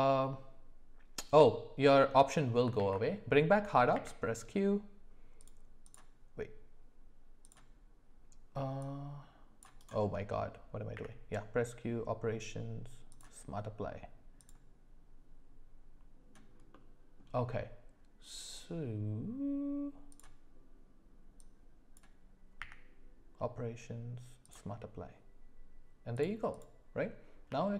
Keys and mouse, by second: 2.7 alt+w, 3.9 q, 5.4 click, 8.8-9.9 drag, 10.9 q, 16.7 middle click, 20.1 click, 21.8 click, 22.6 q, 26.5 click, 27.5 g.